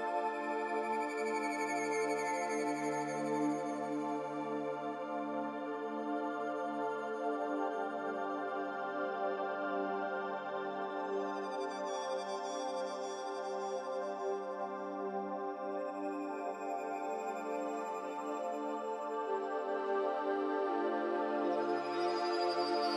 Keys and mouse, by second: 1.4 Tab, 3.3-4.9 middle drag, 5.8 click, 6.9-9.0 middle drag, 9.9-10.9 drag, 11.4-14.1 middle drag, 14.5-15.4 middle drag, 18.7 click, 19.5 click.